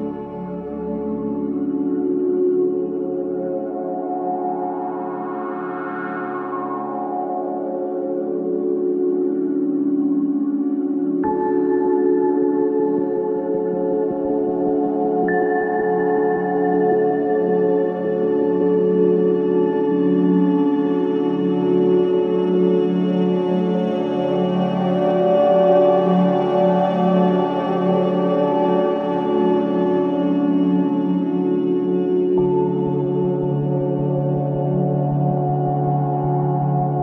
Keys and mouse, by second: 1.0-2.1 drag, 2.1 Tab, 5.6-6.0 middle drag, 7.4 s, 7.9 y, 8.7-10.7 drag, 9.4 s, 11.7-14.5 drag, 12.0 s, 14.5-15.3 middle drag, 15.7 KP_1, 19.4-20.5 middle drag, 21.6-23.6 drag, 23.8 middle drag, 25.7 Tab, 27.2 ctrl+r, 28.4-30.5 drag, 29.7 ctrl+r, 31.0-34.2 drag, 31.8 Tab, 32.8-34.0 right drag, 34.2 middle click.